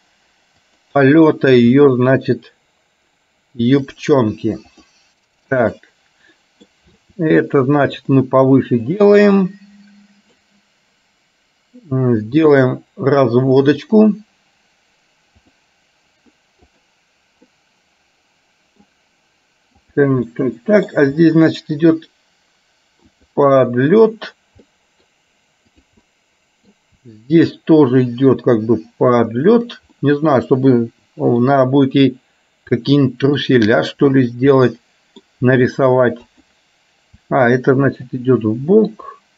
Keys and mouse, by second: 1.7 r, 4.8 click, 5.7-6.8 middle drag, 7.0 r, 9.0 click, 9.4-10.4 middle drag, 12.3 r, 16.8 click, 17.5-18.9 middle drag, 20.4 middle click, 21.3 r, 24.8 middle click, 25.9 click, 26.3 middle click, 27.2 r, 30.2-31.4 middle drag, 32.9 middle click, 34.7 middle click, 35.7 r, 37.4 r, 39.0 click.